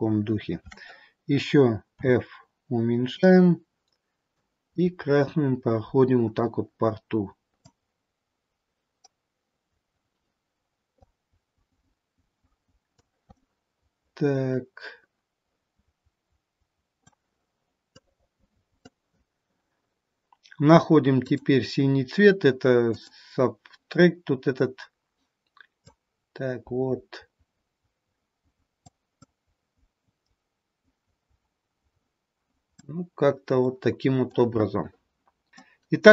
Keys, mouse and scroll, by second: 2.0 f, 4.5 click, 7.7 click, 13.3 middle click, 18.1 click, 21.2 click, 25.9 click, 29.3 click, 33.2-33.6 scroll down 2, 33.6 middle click, 35.5 middle click, 35.5 middle click.